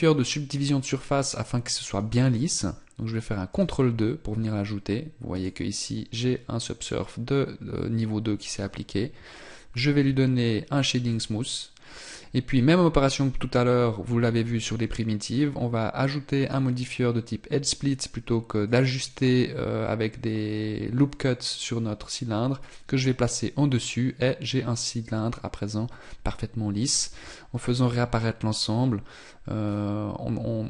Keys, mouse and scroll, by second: 3.5 ctrl+2, 5.3 click, 10.0 t, 14.4 t, 16.4 click, 22.6 click, 27.6 alt+h, 29.6 scroll down 3.